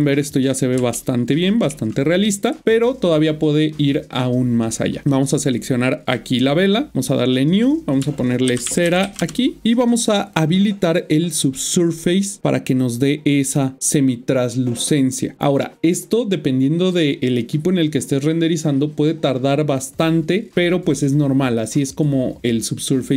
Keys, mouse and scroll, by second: 2.8 shift+middle click, 3.7 click, 6.9 click, 9.1-10.0 typing, 11.4 Return, 12.5 click.